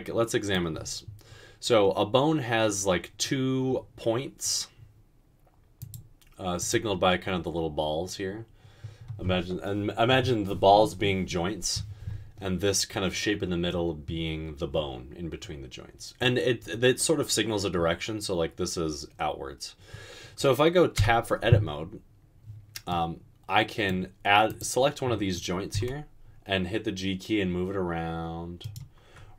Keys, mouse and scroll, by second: 21.1 Tab, 25.9 g.